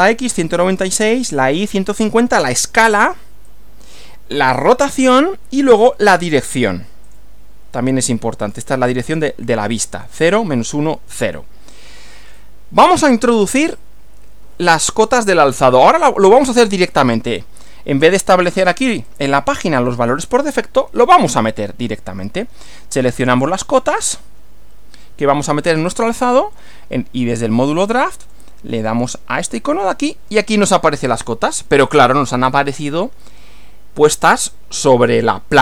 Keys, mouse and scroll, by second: 3.5-4.1 drag, 7.1 click, 8.0-8.7 drag, 11.7-12.5 drag, 19.1 click, 23.5 click, 28.3 click, 29.6 click.